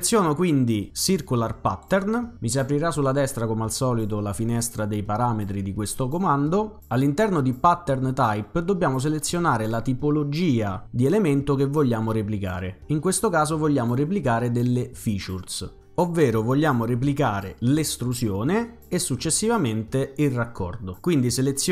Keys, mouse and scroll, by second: 0.1 right click, 0.5 right click, 1.7 click, 9.2 click, 15.1 click.